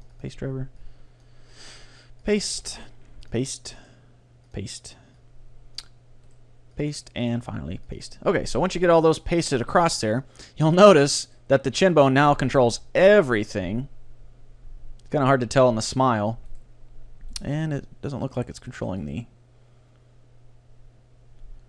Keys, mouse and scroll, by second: 0.8-2.6 drag, 1.5-5.7 right drag, 5.2-7.2 drag, 6.3-8.9 right drag, 8.5 click, 9.1-11.3 drag, 11.9-13.1 right drag, 12.7 g, 16.6-20.9 right drag, 17.7 g, 18.5 g.